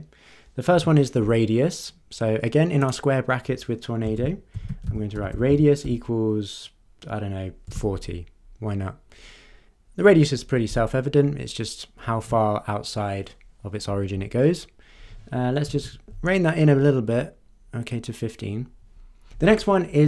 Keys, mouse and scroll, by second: 2.8 click, 4.1-6.3 typing, 7.4-8.2 typing, 15.7 BackSpace, 16.0 5.